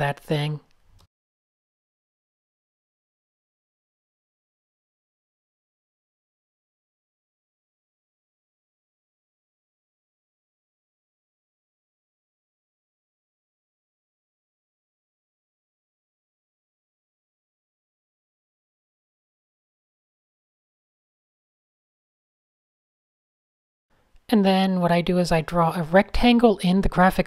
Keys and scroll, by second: 0.3 Tab, 2.0 super+z, 2.7 a, 3.4 super+h, 4.4 alt+super+Tab, 8.7 shift+super+a, 11.9 super+0, 12.0 Tab, 13.5 Tab, 16.8 super+space, 17.1-22.6 typing, 23.6-24.1 typing, 25.1 super+0, 25.6-27.1 typing.